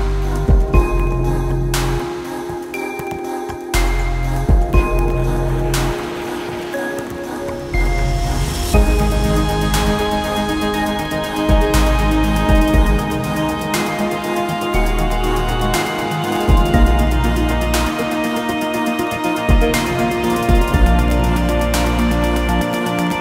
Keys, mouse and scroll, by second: 1.1-1.5 scroll down 2, 1.5 middle click, 2.5 scroll up 1, 2.7 middle click, 3.6 ctrl+s, 4.1-4.6 scroll up 1, 5.3 shift+click, 5.8 shift+click, 6.2 shift+click, 6.5 shift+click, 6.8 x, 8.2-9.1 scroll up 1, 9.1 alt+shift+click, 10.1 e, 13.6 x, 16.1 alt+shift+click, 17.3-19.3 drag, 19.6 scroll down 3, 19.9-22.0 middle drag, 22.0-22.5 scroll up 1, 22.5-23.2 middle drag.